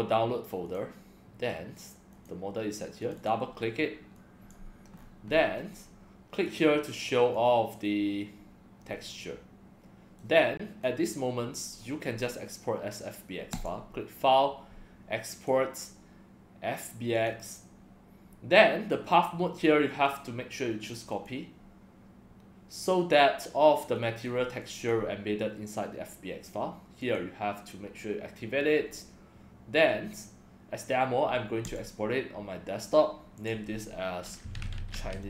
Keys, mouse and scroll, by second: 0.7 click, 2.1 click, 3.0 click, 3.2 click, 4.2-4.5 drag, 5.0-5.6 scroll up 10, 6.5 click, 7.3-7.7 drag, 9.2-10.2 middle drag, 10.8 click, 13.5 click, 15.3 click, 17.1 click, 19.9 click, 21.1 click, 23.9 click, 24.6 click, 27.0 click, 31.6 click, 33.4 click, 34.1-35.2 typing.